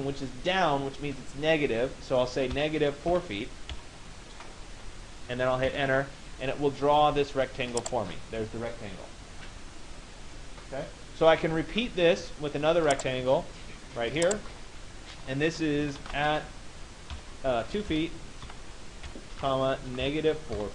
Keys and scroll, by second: 5.2 Return, 6.1 Return, 17.4 BackSpace, 19.5 BackSpace.